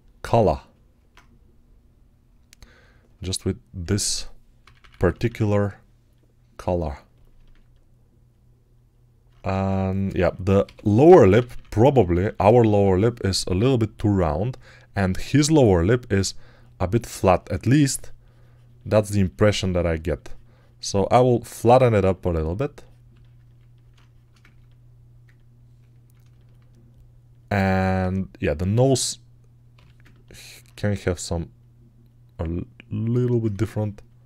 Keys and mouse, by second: 3.7-5.1 typing, 9.4 ctrl+Tab, 10.5-12.3 typing, 16.0 3, 23.3-26.7 ctrl+alt+right drag, 27.8 alt+q, 29.6 g, 33.4 2.